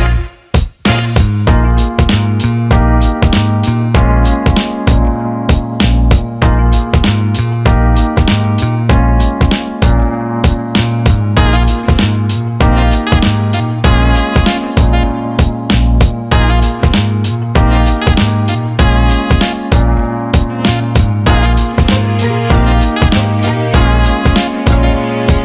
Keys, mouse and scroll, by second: 0.5 click, 12.4-13.7 drag, 17.2 click, 17.9 click.